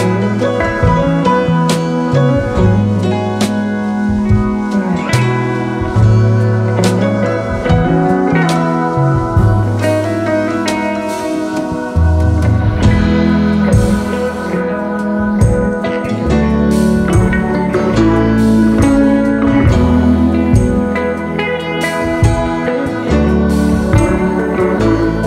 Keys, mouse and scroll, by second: 1.7 double click, 2.4 shift+click, 4.9 space, 5.0 double click, 5.9 alt+scroll down 1, 6.2-8.9 space, 9.5-10.2 space, 15.0 Return, 16.8 space, 17.4 alt+scroll up 1, 19.7 shift+click, 20.3 ctrl+c, 21.7-22.6 typing.